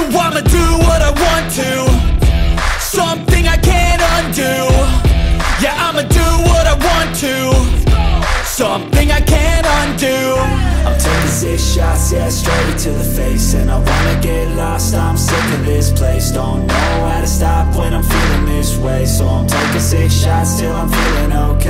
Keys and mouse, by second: 0.3 click, 2.5-3.9 drag, 4.6 click, 6.1 click, 9.7 g, 12.1 click, 13.0 r, 14.5 click, 16.4 r, 17.4 click, 18.0 drag, 19.2 r.